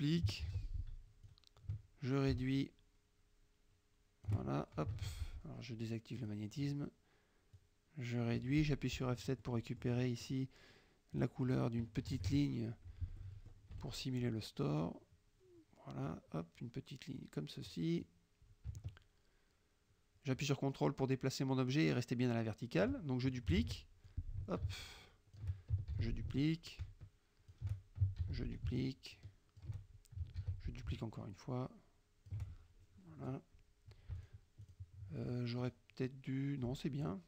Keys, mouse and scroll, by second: 0.5 ctrl+d, 1.3-4.5 drag, 5.1 ctrl+z, 6.3 click, 7.6-8.6 drag, 9.0 F7, 9.5-10.5 middle drag, 11.2 click, 12.0 KP_Subtract, 13.3 middle click, 13.8 F1, 14.8-16.4 drag, 17.3-18.0 drag, 18.1-23.1 drag, 23.7 ctrl+d, 24.1-25.6 ctrl+drag, 26.0 ctrl+shift+d, 26.4-27.8 ctrl+drag, 28.3 ctrl+d, 28.6-29.8 ctrl+shift+drag, 30.5 ctrl+d, 30.8-32.6 ctrl+shift+drag, 34.3 shift+click, 34.7 shift+click, 35.7 shift+click, 37.1 shift+click.